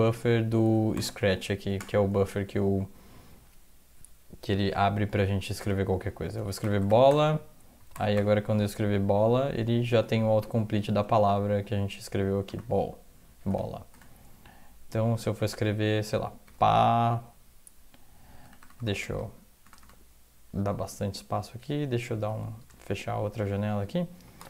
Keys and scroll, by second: 0.0 Down, 0.7 ctrl+x, 0.9 o, 1.4 Down, 1.8 Return, 5.6 Return, 6.3-8.1 typing, 7.1 Return, 12.5 Return, 13.5 Return, 13.9 Return, 16.4 typing, 18.4 Return, 18.6 Return, 18.8 Return, 18.9 Return, 19.1 Return, 19.8 Return, 19.8 Return, 22.3 ctrl+x, 22.7 1, 23.6 Up, 24.1 Up.